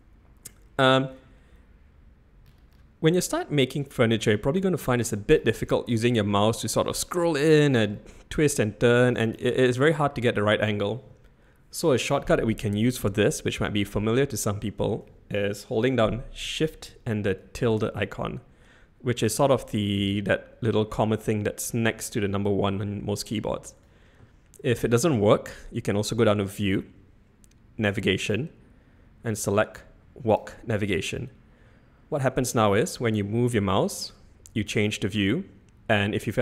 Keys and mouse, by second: 3.6-4.8 middle drag, 6.3-6.8 shift+middle drag, 7.9-9.0 middle drag, 9.6 middle click, 17.6 shift+`, 26.5-36.4 drag.